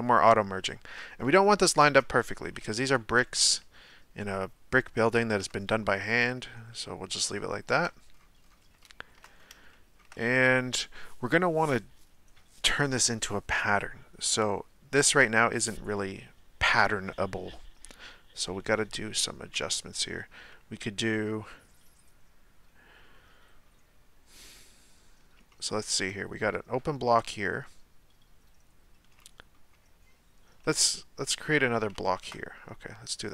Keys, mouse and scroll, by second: 0.1-0.7 scroll up 1, 0.7 shift+middle click, 1.2-1.5 scroll up 1, 1.5 shift+middle click, 2.4 g, 5.6-6.7 scroll down 1, 6.7 shift+middle click, 7.2-8.1 scroll down 1, 8.1-8.8 scroll down 4, 8.8 shift+middle click, 9.4-9.7 scroll down 1, 9.7-12.8 shift+middle drag, 25.5-28.6 shift+middle drag, 29.2-31.9 shift+middle drag, 31.9 shift+a.